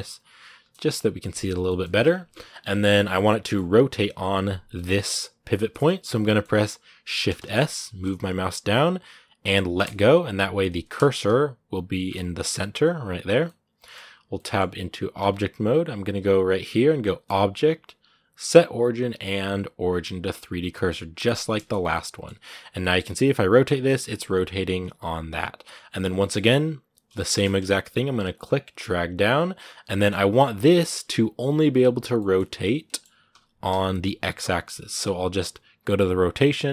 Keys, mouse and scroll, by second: 3.0 scroll down 2, 3.2-4.6 middle drag, 4.6-6.0 scroll up 2, 6.0 middle click, 6.3-9.4 scroll up 2, 9.4 scroll up 1, 9.6 shift+s, 11.8 shift+s, 13.2 middle click, 14.0 scroll down 1, 14.1 middle click, 15.0 Tab, 21.4 scroll down 2, 21.6 middle click, 22.2-22.6 scroll down 2, 22.6 middle click, 23.0 r, 27.0-28.1 shift+middle drag, 28.1-29.7 drag, 29.7 middle click, 30.2 r, 31.1-31.9 scroll down 1, 31.9 middle click, 32.2 scroll down 2, 32.7 middle click, 33.1 r.